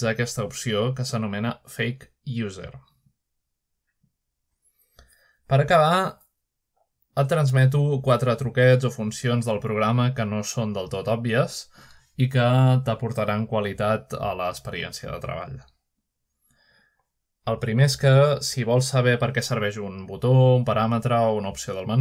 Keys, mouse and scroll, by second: 1.0-2.0 drag, 3.3 click, 6.7-8.1 scroll up 1, 8.1-10.3 middle drag, 10.3 click, 11.8 shift+click, 12.3 shift+F3, 15.7-16.2 shift+scroll down 1, 16.2 middle click, 16.4-17.3 scroll up 1, 17.1-19.6 middle drag, 19.6-22.0 scroll up 1.